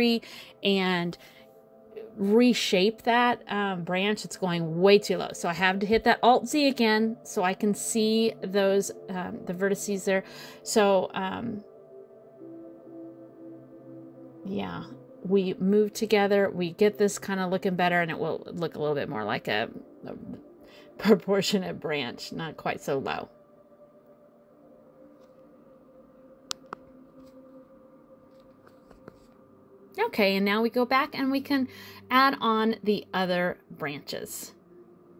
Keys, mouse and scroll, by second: 1.5 alt+z, 3.2 click, 4.1 shift+click, 4.9 click, 6.3 middle click, 7.1 middle click, 8.3 shift+click, 9.8 click, 11.0 shift+click, 12.3 click, 13.1 shift+click, 13.8 click, 15.2 middle click, 16.1 click, 17.0 click, 18.3 click, 19.0 click, 20.3 middle click, 22.3 middle click, 24.7 alt+z, 25.1 middle click, 26.3 click, 27.7 click, 29.3 click, 31.1 click, 31.9-32.9 scroll down 1, 32.9 middle click, 33.5 click, 35.0 click.